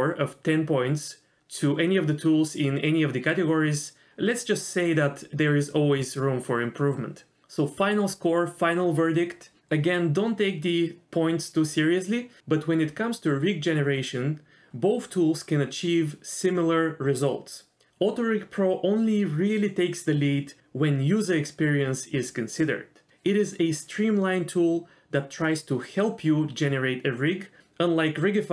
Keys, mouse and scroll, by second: 0.3 click, 2.6 Tab, 4.0 Tab, 5.4 click, 5.7 middle click, 6.8 g, 10.7 g, 12.1 middle click, 12.7-13.0 scroll down 1, 13.0 middle click, 14.0-18.3 middle drag, 18.4-18.8 scroll up 2, 18.8 click, 19.0 middle click, 19.3 click, 19.6 middle click, 21.2 r, 22.7 click, 23.3 middle click, 23.4 r, 24.7 g, 26.3 click, 26.6 middle click, 27.2 g.